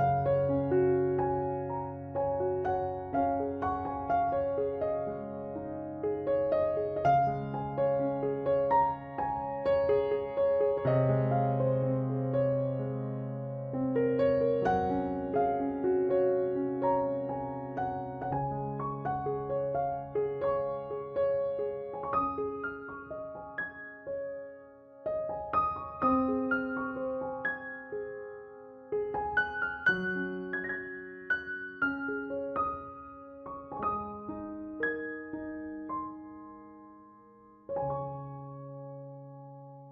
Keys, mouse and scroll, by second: 0.0-3.6 typing, 6.5 click, 7.6 r, 8.7 s, 9.6 KP_Decimal, 10.5-11.9 middle drag, 11.4 e, 14.7 e, 15.7 r, 17.5 s, 19.0-20.9 drag, 20.0 r, 21.1 Tab, 21.5 z, 22.0 ctrl+s, 23.2 z, 24.8 Tab, 25.3 right click, 25.6 c, 26.2 right click, 29.0 c, 29.2 right click, 29.6 c, 31.0-32.9 drag, 32.9 e, 34.0 z, 35.2-36.2 drag, 36.4 KP_3, 36.7 KP_Decimal, 37.9 ctrl+b, 39.3 KP_Decimal, 39.6 Tab.